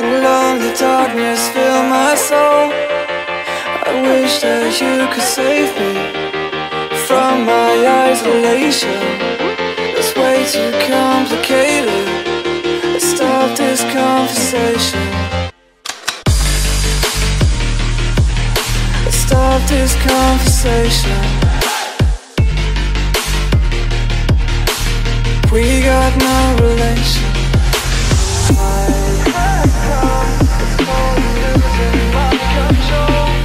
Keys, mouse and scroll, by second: 0.3 click, 1.3 click, 4.0 click, 4.4 ctrl+z, 5.0 click, 5.8 click, 6.2 z, 6.8 click, 7.2 click, 10.5 click, 11.4 click, 13.2 click, 13.5 click, 13.7 F9, 17.2 click, 18.1 click, 19.4 click, 20.1 click, 23.0 click, 23.3-24.5 typing, 26.4 click, 27.1 click, 27.5 F9, 28.3 click, 28.3 middle click, 29.7 middle click.